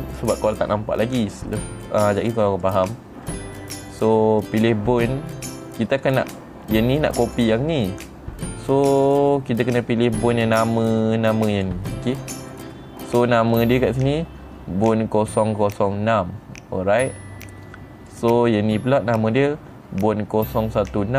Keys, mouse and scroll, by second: 2.7 click, 3.2 click, 6.5 click, 7.8 click, 9.6 click, 12.1 click, 18.6 click.